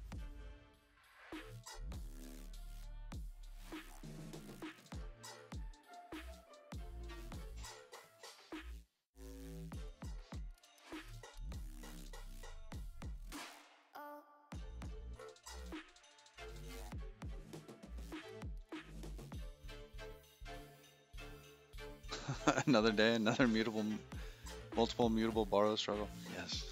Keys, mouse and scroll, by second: 6.0 click.